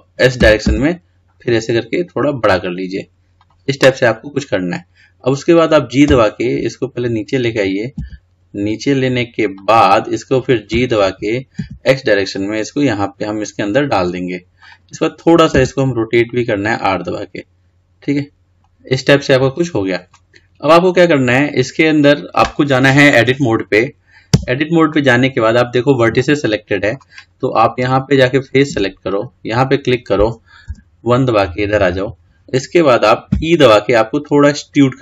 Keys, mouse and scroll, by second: 18.4 middle click, 19.0-19.6 scroll down 5, 19.6-20.5 scroll up 3, 20.5-20.9 scroll down 1, 20.9 scroll up 3, 24.5 Tab, 26.3-28.3 middle drag, 28.3 click, 29.2 click, 30.8 KP_1, 33.5 e.